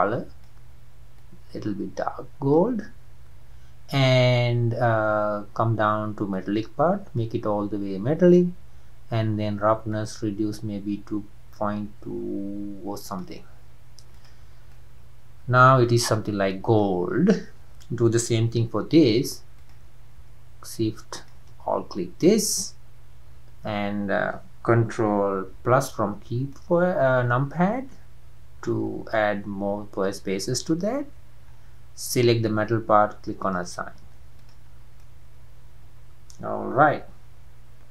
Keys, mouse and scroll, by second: 6.5-7.5 drag, 7.5-9.5 scroll down 3, 9.5-10.1 scroll down 1, 10.1-12.9 drag, 14.3 click, 14.6 scroll down 1, 14.7-15.8 middle drag, 15.8-16.1 scroll up 1, 16.1-19.7 middle drag, 19.7 alt+click, 25.5 ctrl+KP_Add, 26.5-33.6 middle drag, 33.6 click, 34.7 scroll down 3, 35.0-37.9 middle drag.